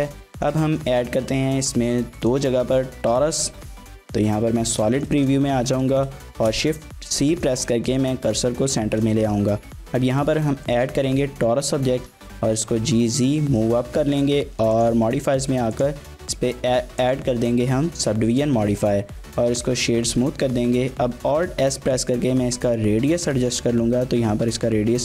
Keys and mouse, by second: 0.0 ctrl+space, 0.4 shift+middle click, 0.6 middle drag, 1.1 z, 4.8 drag, 4.9 shift+middle click, 5.2 middle click, 5.5 shift+a, 6.3 shift+c, 7.0 shift+middle drag, 7.3 middle click, 7.9 shift+middle click, 8.8 shift+a, 11.0 middle click, 12.2 g, 12.2 z, 13.1 click, 14.8-15.8 drag, 17.0 click, 18.4 shift+middle drag, 18.8 Tab, 19.3 Tab, 19.6 click, 20.1 Tab, 21.5 alt+s.